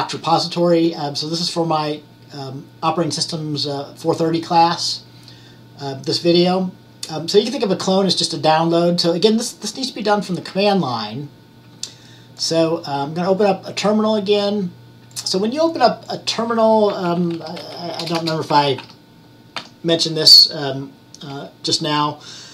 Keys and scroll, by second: 17.4-19.7 typing.